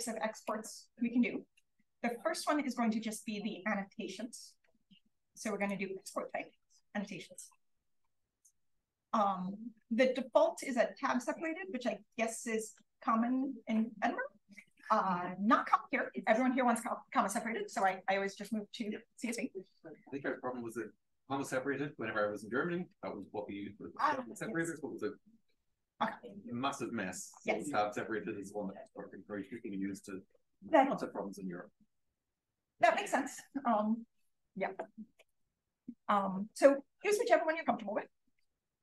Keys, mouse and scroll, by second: 6.2-7.4 drag, 7.6-8.8 drag, 35.2 click.